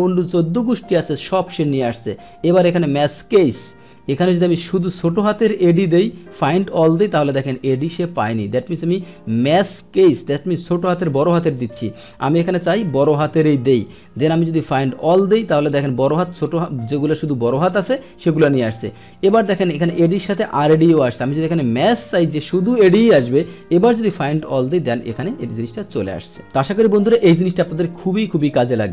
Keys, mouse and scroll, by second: 3.0 click, 3.9 click, 6.0 click, 11.5 click, 14.8 click, 21.8 click, 22.1-23.8 middle drag, 23.8 click, 23.9 middle click, 24.5-28.9 middle drag.